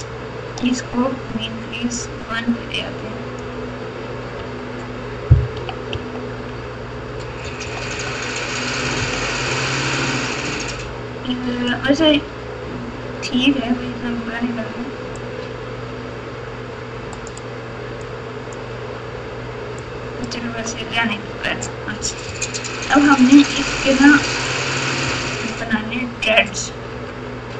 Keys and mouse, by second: 1.9-3.4 drag, 4.3 Tab, 5.5 KP_2, 5.9 KP_4, 7.4 KP_8, 7.6 KP_8, 8.9 KP_6, 9.2 KP_6, 13.3 Tab, 15.1-17.2 drag, 18.0 middle click, 19.9 click, 20.3 Tab, 20.9 Tab, 22.2 ctrl+KP_4, 22.7 ctrl+KP_4, 22.9 ctrl+KP_4, 24.2 KP_4, 25.0 KP_6, 27.0 Tab.